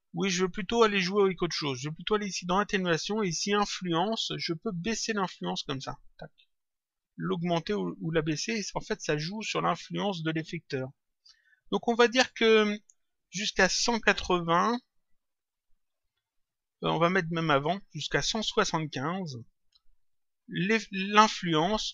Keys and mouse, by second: 2.2 click, 5.1 click, 18.1 click.